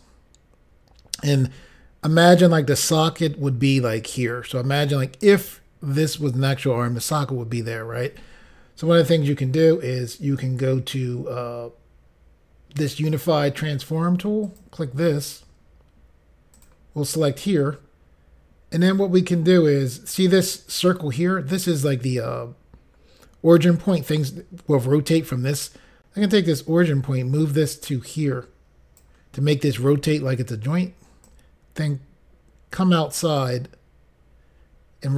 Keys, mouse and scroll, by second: 3.9 click, 6.0 click, 14.5 click, 16.6 click, 26.4 click, 31.3 click.